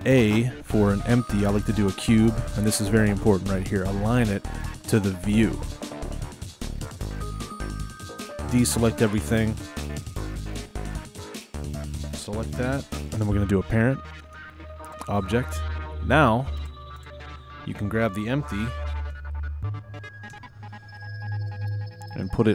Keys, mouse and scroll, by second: 5.6-6.7 drag, 6.7-7.4 scroll down 4, 7.4-9.2 shift+middle drag, 7.4 drag, 9.2 click, 9.8 click, 11.5 shift+click, 12.5 shift+click, 14.2 p, 16.6 click, 17.0 click, 19.2 KP_1, 20.4 KP_7, 21.1 scroll down 4, 21.7-22.5 shift+middle drag.